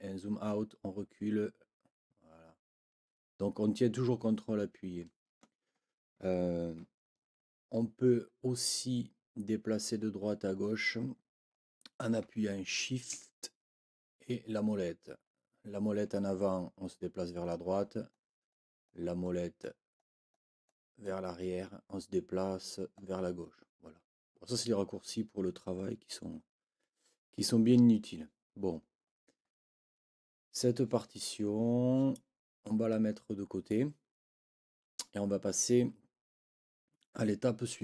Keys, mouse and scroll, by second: 0.8 scroll down 2, 1.9-2.6 scroll up 4, 2.9 scroll down 2, 7.0 shift+scroll up 2, 7.7 shift+scroll up 2, 7.8-8.6 shift+scroll down 4, 9.0-9.4 scroll up 2, 9.9-10.2 scroll up 2, 10.6-10.9 scroll up 2, 11.0-11.4 scroll down 2, 11.6 scroll down 2, 13.6-14.3 shift+scroll up 4, 14.6 shift+scroll up 2, 15.1 shift+scroll up 2, 16.0 scroll up 2, 17.7-18.0 scroll down 2, 18.5-19.1 scroll down 2, 19.2-20.6 scroll down 6, 21.0 scroll down 2, 23.0-24.9 scroll up 11, 25.2 shift+scroll up 2, 29.0 shift+scroll up 2.